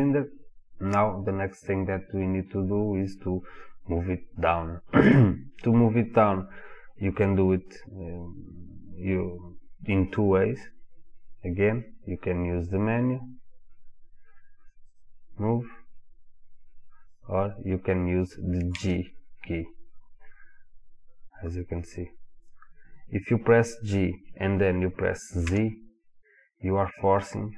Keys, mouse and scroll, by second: 14.9 click, 17.1 click, 18.8 g.